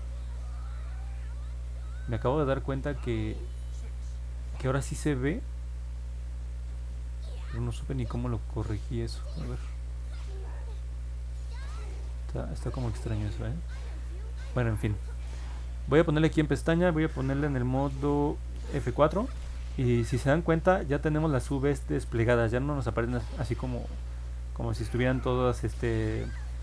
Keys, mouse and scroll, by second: 6.9 click, 10.1 click, 12.1 click, 13.2 click, 16.1 click, 19.9 middle click, 19.9-20.3 scroll down 2, 20.6 scroll up 1.